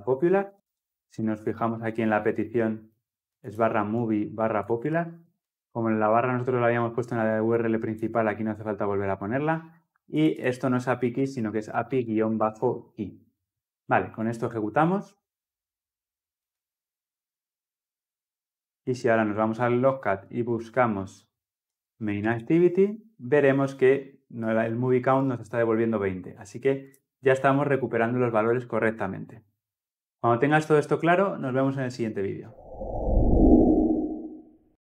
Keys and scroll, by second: 14.1 shift+F10.